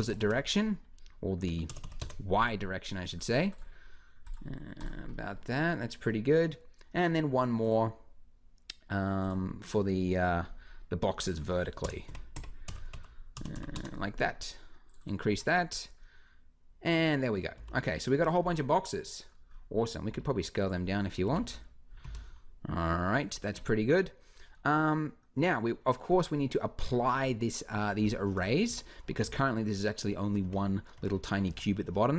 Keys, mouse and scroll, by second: 1.0-2.8 middle drag, 12.1 Tab, 17.3 g, 19.9 s, 21.0 g, 28.5 Tab, 29.0 z, 30.2 Tab, 30.8 Tab, 31.3 Tab.